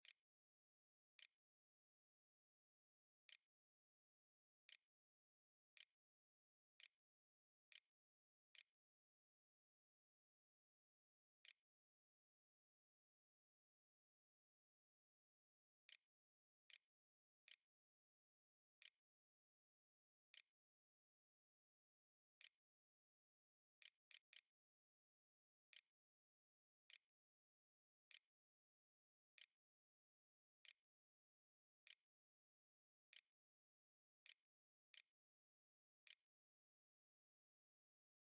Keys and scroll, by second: 0.0-12.4 typing, 14.6-36.3 typing.